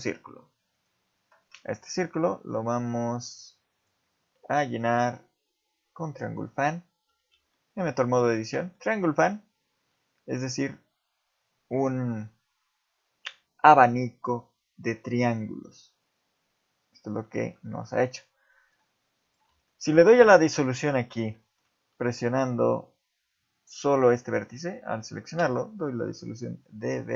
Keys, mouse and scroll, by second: 2.0-2.3 scroll down 2, 3.7 click, 6.7 scroll up 5, 7.1 Tab, 7.5 shift+middle click, 8.1 scroll up 2, 8.7 shift+middle click, 17.7 ctrl+Tab, 19.2 click, 19.7 shift+middle click, 20.7 right click, 21.3 shift+middle click, 25.4 x.